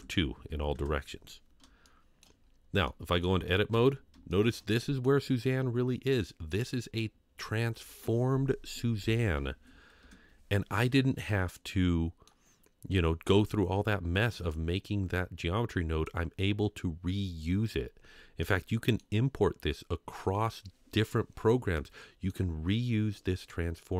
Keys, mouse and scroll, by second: 1.8-2.2 shift+middle drag, 2.4 scroll up 2, 2.8-3.2 middle drag, 3.7 Tab, 4.3 shift+middle click, 4.7 middle click, 6.2 middle click, 6.9 scroll down 1, 7.1 scroll up 1, 10.0 Tab, 10.7-11.5 scroll down 2, 11.5-12.3 middle drag, 14.5-16.1 drag, 18.4-19.0 middle drag, 21.8-22.3 middle drag.